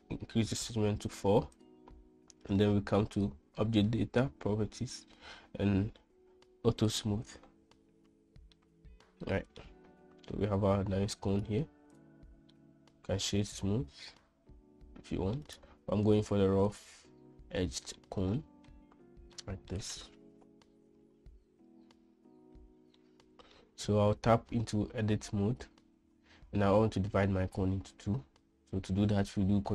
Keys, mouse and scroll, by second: 1.9-3.7 drag, 7.2 click, 8.9-10.0 middle drag, 10.7-11.5 middle drag, 12.9-15.7 middle drag, 18.0 middle drag, 19.7-20.1 middle drag, 23.5 middle click, 24.6 Tab.